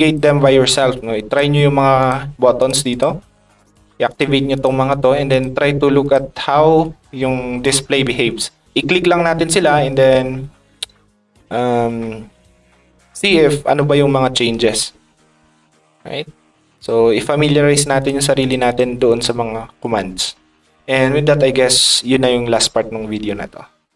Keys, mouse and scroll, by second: 0.0 click, 1.2 click, 2.0 click, 2.5 click, 2.9 click, 3.6 click, 4.1 click, 4.5 click, 4.9 click, 5.2 click, 6.0 click, 7.6 click, 16.7 click, 17.6 click, 17.9 click, 18.3 click, 18.6 click.